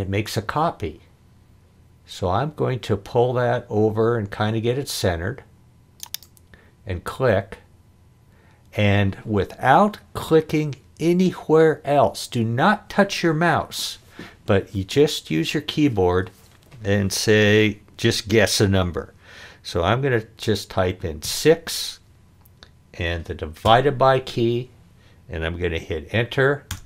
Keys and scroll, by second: 21.2 6, 23.6 /, 26.7 Return.